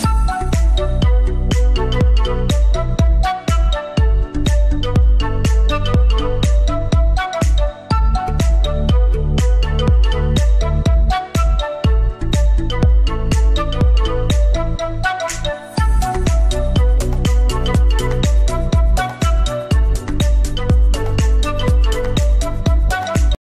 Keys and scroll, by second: 4.7 Escape, 7.1 c, 7.5 Escape, 9.7 F3, 10.1 Escape, 14.5 F3, 14.9 Escape, 17.5 shift+F2.